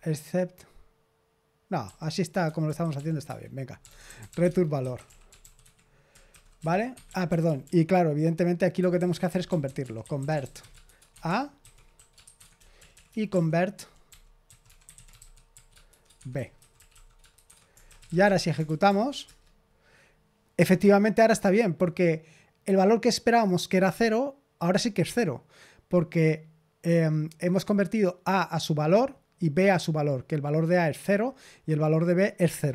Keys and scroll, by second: 1.8-19.2 typing, 11.2 Escape, 17.4 shift+Escape.